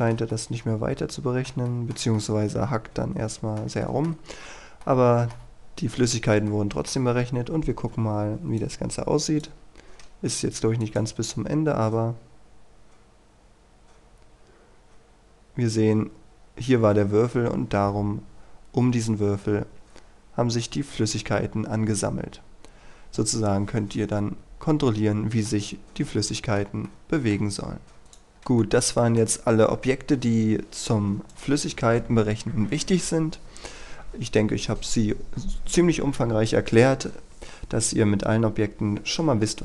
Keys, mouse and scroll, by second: 0.0-1.5 shift+middle drag, 1.7-3.7 shift+middle drag, 3.8 shift+middle click, 4.2-4.8 scroll up 1, 4.8 middle click, 6.5-7.5 shift+middle drag, 8.6 click, 22.1-23.0 scroll down 1, 25.5 middle click, 26.9 shift+middle click, 28.0 click, 28.6-29.7 middle drag, 31.3 right click.